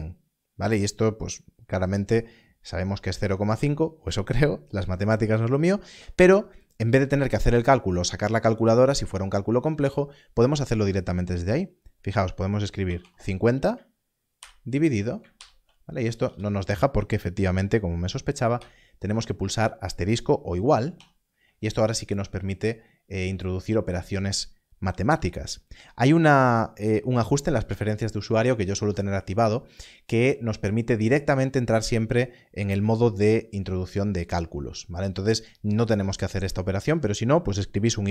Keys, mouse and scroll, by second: 12.8 5, 14.4-16.3 typing, 17.8 BackSpace, 18.5 shift++, 20.9 shift+0, 22.6 BackSpace.